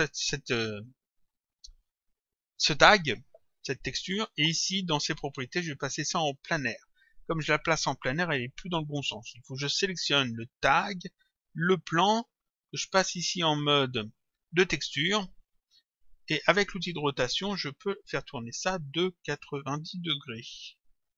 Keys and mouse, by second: 5.7 click, 10.7 click, 13.1 click, 16.5 click, 18.0 click, 19.4 shift+click.